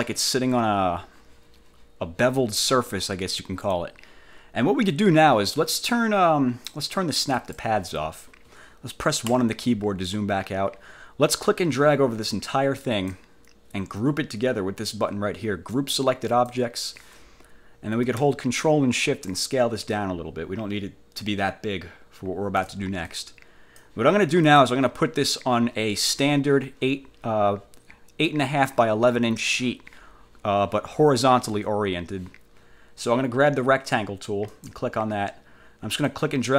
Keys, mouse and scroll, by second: 7.5 click, 9.4 1, 11.4-13.4 drag, 16.4 click, 19.4-22.9 ctrl+shift+drag, 23.2 ctrl+shift+click, 24.6 click, 34.6 click, 36.2-36.5 drag.